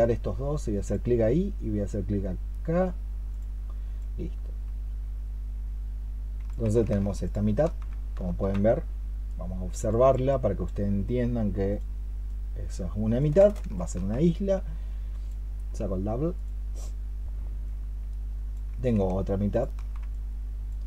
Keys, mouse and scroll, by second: 7.1 ctrl+shift+click, 9.7 alt+click, 10.1 alt+click, 13.6 ctrl+shift+click, 19.4 ctrl+shift+click.